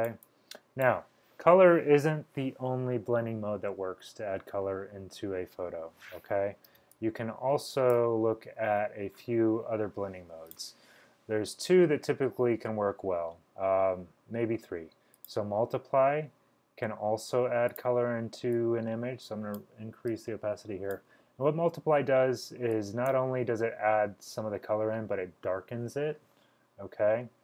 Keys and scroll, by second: 6.8 space, 7.3-7.9 space.